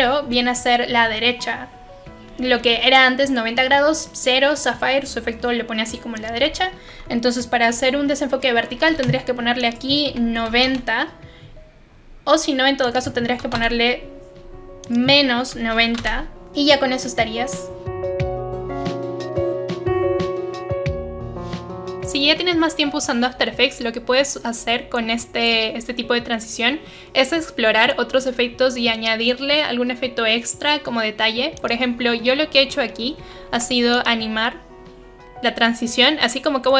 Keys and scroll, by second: 8.7 0, 8.9 Return, 10.1-11.0 typing, 13.4 typing, 13.4 Return, 15.3-16.4 typing, 33.4 u.